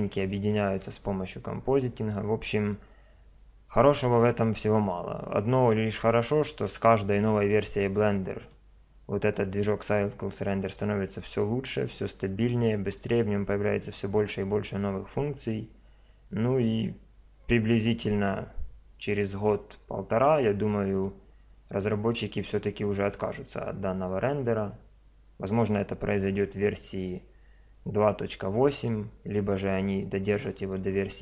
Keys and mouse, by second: 8.4 click, 10.0 middle drag, 20.9 click.